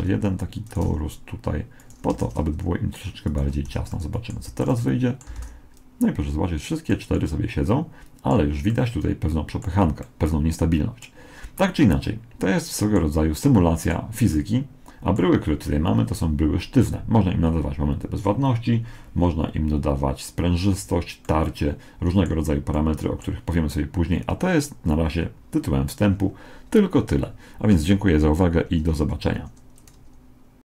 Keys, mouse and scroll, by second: 0.9 g, 2.2 shift+d, 3.7 a, 3.9-6.2 middle drag, 4.4 z, 5.4 alt+a, 6.6 middle click, 7.0 middle click, 7.8 middle click, 10.0-13.0 middle drag, 13.4-16.0 middle drag, 21.2-24.6 middle drag.